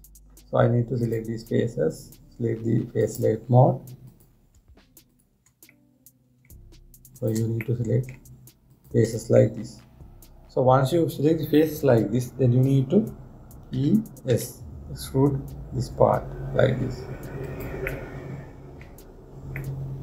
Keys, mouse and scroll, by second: 1.7 click, 3.6-4.9 drag, 5.7 shift+click, 6.4-7.8 middle drag, 7.8 shift+click, 8.3-9.4 middle drag, 9.4 shift+click, 10.0-13.2 middle drag, 14.4 e, 18.6-19.8 middle drag, 19.8 scroll down 1, 19.9 scroll up 1.